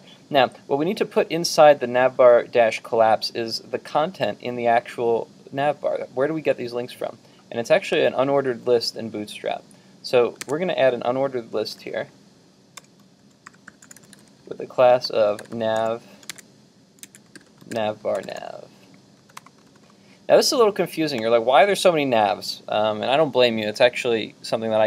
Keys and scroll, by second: 10.5 super+Tab, 13.4 super+Tab, 16.5 super+Tab.